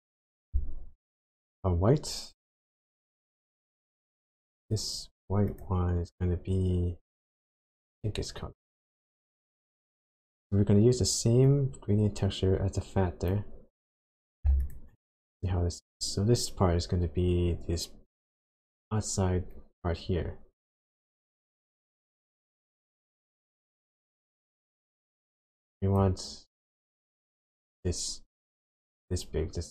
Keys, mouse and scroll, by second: 4.6 click, 5.5 click, 9.7 click, 11.4 click, 14.7 ctrl+shift+click, 22.8 click.